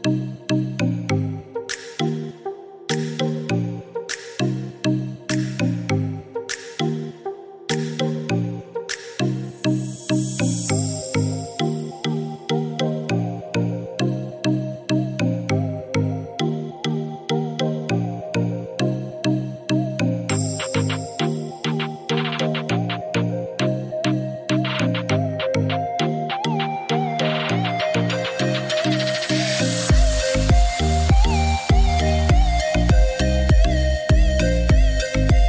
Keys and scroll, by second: 0.2 Escape.